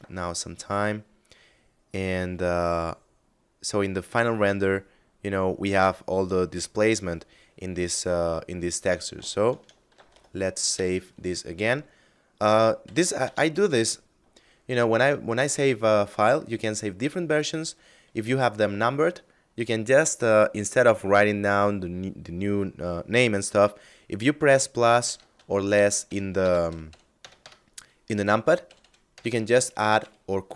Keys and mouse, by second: 9.3 ctrl+shift+s, 10.1 KP_Add, 12.3 KP_Subtract, 12.7 KP_Add, 24.5 KP_Add, 24.6 KP_Subtract, 25.2 KP_Add, 25.5 KP_Subtract, 25.8 KP_Add, 26.0 KP_Subtract, 26.7 KP_Add, 27.9 KP_Subtract, 28.6 KP_Add, 28.9 KP_Subtract.